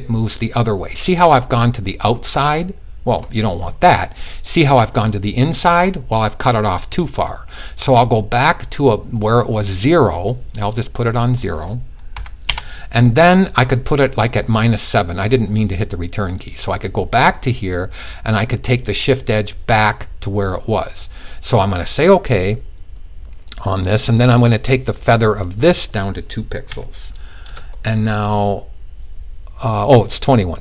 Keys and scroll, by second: 11.6 0, 26.2 typing.